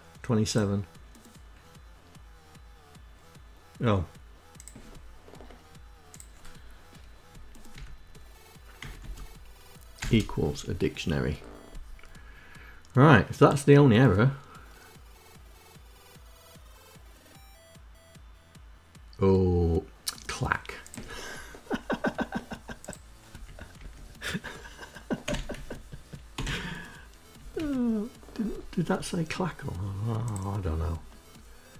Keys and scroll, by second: 5.8 Left, 6.9 Left, 7.1 space, 8.2 space, 21.4 Right, 21.9 Left, 23.3 Delete, 23.3 o, 23.6 Right, 24.4 Delete, 24.5 k, 25.4 Down, 25.6 Up.